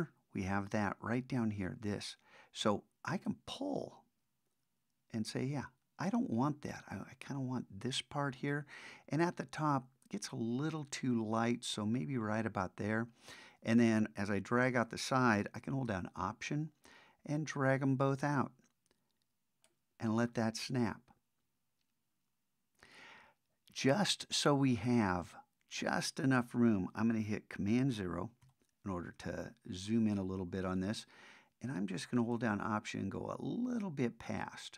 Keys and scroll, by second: 28.4 super+0.